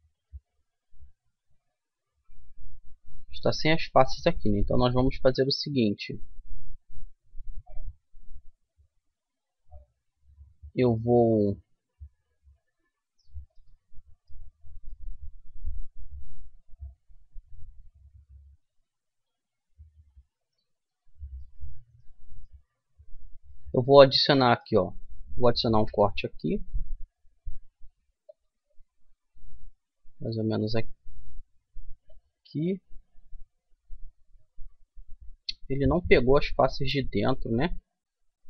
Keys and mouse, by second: 1.2 middle click, 2.1 middle click, 2.8 middle click, 3.7 middle click, 5.3 middle click, 5.9 middle click, 6.1 middle click, 9.7 middle click, 10.9-12.8 middle drag, 13.3-16.3 middle drag, 16.7-18.9 middle drag, 22.4-27.2 middle drag, 25.4 ctrl+r, 32.3-34.0 middle drag.